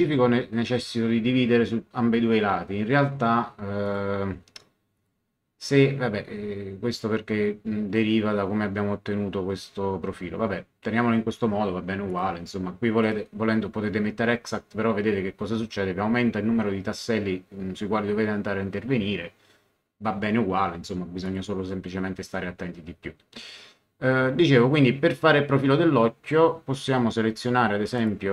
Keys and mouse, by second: 3.8 click, 4.9 click, 12.1 click, 21.2 click, 28.0 click.